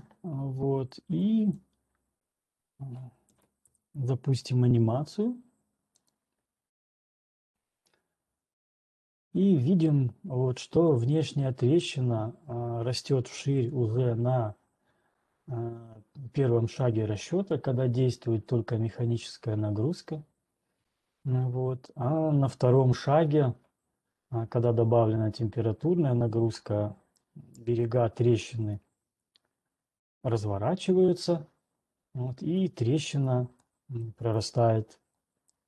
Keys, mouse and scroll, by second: 0.5 click, 2.0 click, 2.4 click, 2.8 scroll, 3.3 4, 3.4-3.9 scroll down 3, 8.0-11.2 drag, 21.1 typing, 29.0 right click, 29.0-30.0 scroll, 33.5 scroll, 34.5 right click, 34.5-35.0 scroll.